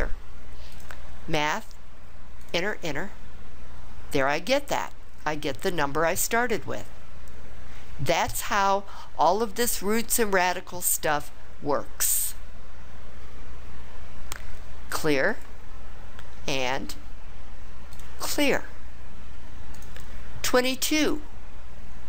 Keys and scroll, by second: 2.4 Return, 2.7 Return.